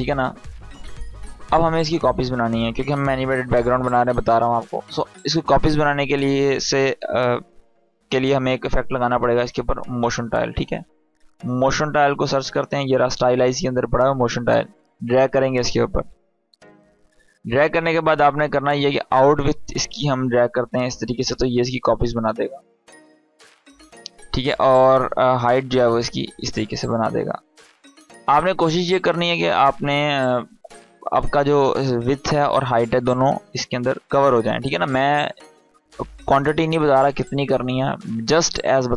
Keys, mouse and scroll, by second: 4.9 click, 8.9-10.4 typing, 12.6-13.3 typing, 13.4-16.2 drag, 18.6-23.6 drag.